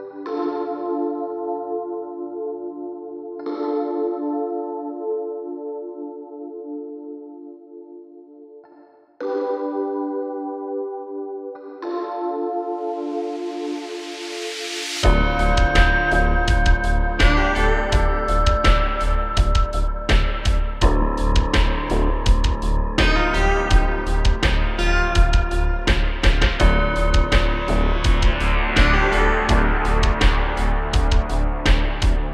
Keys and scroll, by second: 1.4 space, 1.4 space, 2.5 super+z, 4.7 1, 4.9 Return, 5.2 1, 5.3 Return, 5.4 1, 5.5 Return, 9.1 space, 10.1-10.5 typing, 11.8 space, 11.9 space, 12.0 space, 14.9-15.7 typing, 16.8-18.3 typing, 19.7 space, 23.8-25.0 typing, 27.9 space, 29.1-30.8 typing.